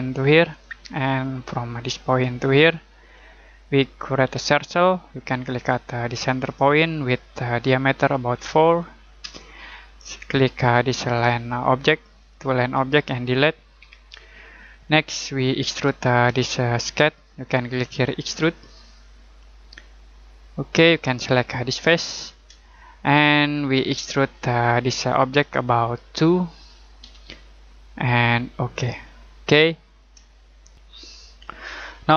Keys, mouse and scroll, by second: 4.3 c, 6.4 click, 8.3 4, 9.2 Return, 10.7 click, 12.2 ctrl+click, 13.8 Delete, 14.5 scroll down 1, 14.8-16.3 scroll up 1, 18.4 click, 21.6 click, 22.7 middle click, 27.0 2, 28.7 click, 29.5 middle click, 30.3 middle click, 30.7 click.